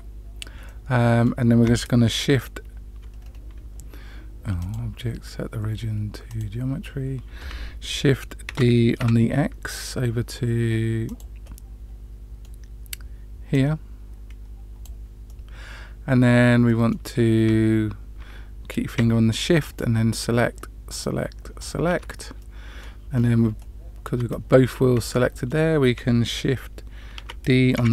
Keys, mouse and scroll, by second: 0.6-1.2 middle drag, 3.2-3.7 scroll down 2, 4.5-6.5 drag, 8.4 shift+d, 11.4-12.5 middle drag, 13.5-14.8 drag, 15.2-17.0 middle drag, 19.6 shift+click, 20.8 shift+click, 21.5 shift+click, 22.3-22.8 middle drag, 23.1 scroll down 1, 23.2 scroll up 1, 23.5-24.0 shift+middle drag, 25.1-25.5 shift+middle drag, 27.1 shift+d.